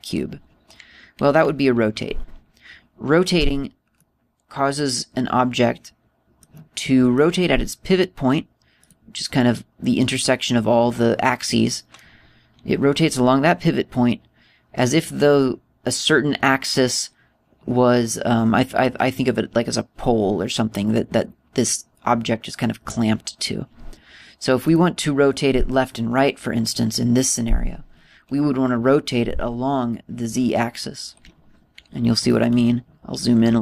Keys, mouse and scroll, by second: 4.7 middle click, 7.6 middle click, 9.6 right click, 25.4 click, 33.3 scroll up 3.